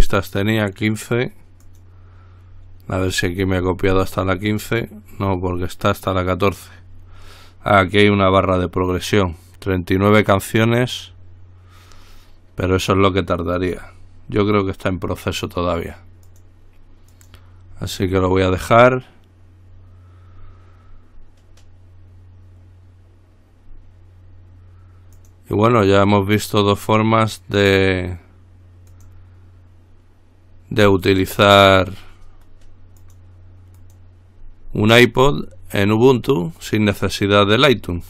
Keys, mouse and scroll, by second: 1.8 click, 3.2-5.0 scroll down 1, 5.3-5.9 scroll down 2, 13.8-14.5 scroll up 2, 16.5 click, 17.3 click, 18.3-19.2 scroll up 2, 19.2 scroll up 1, 20.4-21.2 scroll up 2, 25.4 click, 29.1 click, 31.6-32.2 scroll up 1, 33.2 click, 34.0 click, 34.9-35.5 scroll up 2.